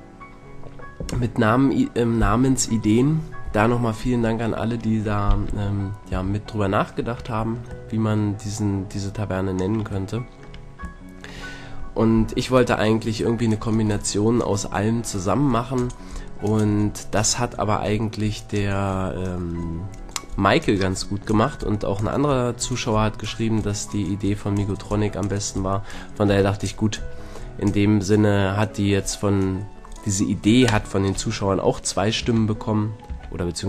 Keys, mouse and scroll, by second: 5.5 KP_1, 6.1 KP_3, 9.7-10.2 drag, 10.2 middle click, 10.3-11.1 drag, 10.7-13.0 middle drag, 32.2 Tab, 33.1 Tab.